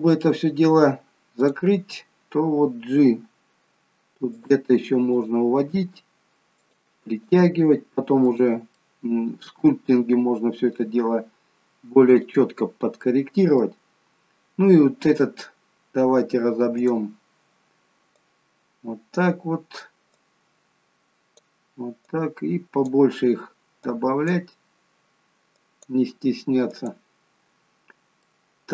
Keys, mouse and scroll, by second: 1.3 click, 3.0 g, 5.2 click, 5.7 g, 7.2 click, 7.5 g, 8.8 middle click, 12.1 click, 13.0 middle click, 13.9-15.2 scroll down 2, 16.7 click, 18.3 click, 22.1 click, 23.9 click, 26.7 click, 27.6-28.0 scroll up 1, 28.3 middle click, 28.3-28.7 scroll up 2.